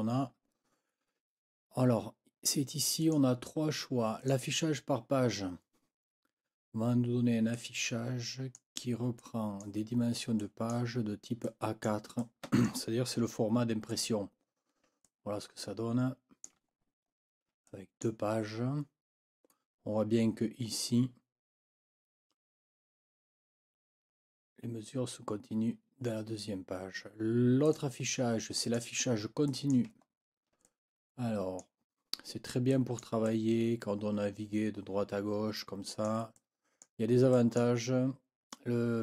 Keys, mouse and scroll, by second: 3.0 click, 4.2 click, 7.5-8.7 drag, 9.4 click, 9.6 click, 10.8 click, 11.4 click, 12.2 click, 14.1-14.7 ctrl+scroll down 4, 15.0-16.6 ctrl+drag, 17.1 ctrl+scroll up 1, 17.7 ctrl+click, 27.7 click, 28.6 click, 29.5 click, 30.1 ctrl+scroll up 2, 30.7-31.8 ctrl+drag, 32.7 click, 33.3-36.2 drag, 36.3 click, 37.3 click.